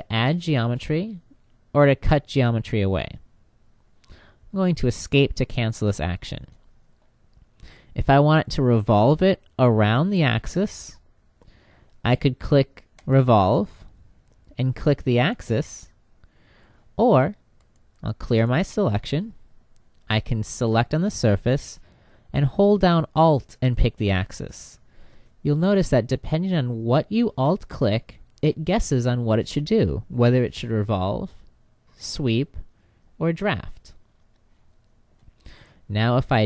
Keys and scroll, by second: 4.8 Escape.